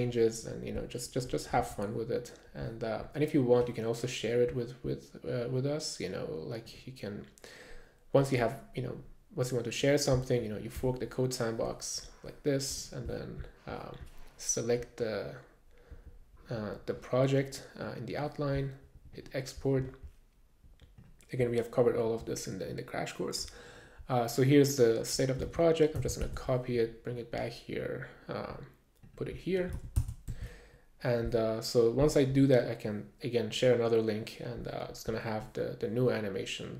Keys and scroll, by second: 25.5 super+a, 26.3 super+c, 26.4 super+Tab, 29.8 super+a, 30.3 super+s.